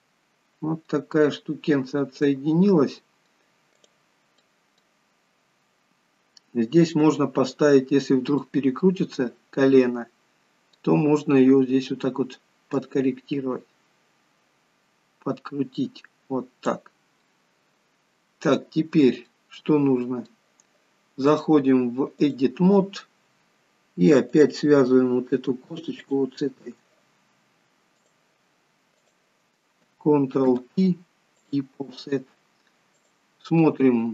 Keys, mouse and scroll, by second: 0.0 middle click, 2.4 middle click, 4.0 click, 4.6 middle click, 8.5 middle click, 12.9 click, 17.3 middle click, 19.4 middle click, 21.4 click, 26.2 shift+click, 28.2 click, 29.1 click, 30.6 ctrl+p, 33.1 click.